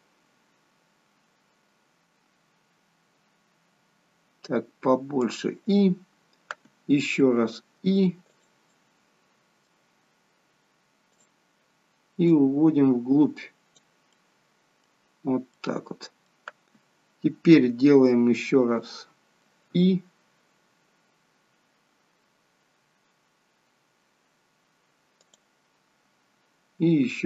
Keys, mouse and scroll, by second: 7.5 i, 8.7 middle click, 11.0 click, 12.3 click, 14.2 middle click, 15.5 middle click, 19.8 i, 27.1 i.